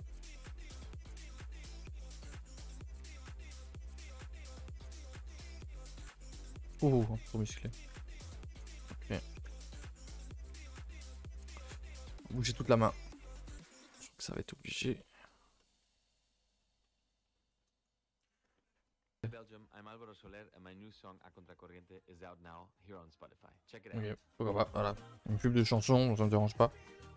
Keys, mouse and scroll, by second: 0.1 scroll up 1, 0.3-0.8 middle drag, 0.8 alt+click, 1.1 g, 2.0 g, 3.5 alt+click, 3.7-4.1 middle drag, 4.1 Tab, 4.3 middle click, 4.9 Tab, 5.0 middle click, 5.7 s, 6.8 middle click, 7.4 s, 7.9 g, 8.5 middle drag, 8.6 Tab, 8.8 middle click, 9.0 a, 9.2 a, 9.4 middle click, 9.7 ctrl+s, 9.9 shift+middle click, 10.1 scroll up 2, 10.3 Tab, 10.4-10.9 scroll down 2, 10.6 a, 10.8 a, 10.9 middle click, 11.1 3, 11.7 middle click, 12.6 Tab, 13.2 click, 13.2 h, 14.0-14.4 middle drag, 14.4 click, 14.5 Tab, 14.7-15.3 shift+middle drag, 15.3 scroll up 1, 15.6-17.0 middle drag, 17.0 click, 17.3 middle click, 18.3 alt+click, 18.6 shift+middle click, 19.2 g, 26.7 alt+h.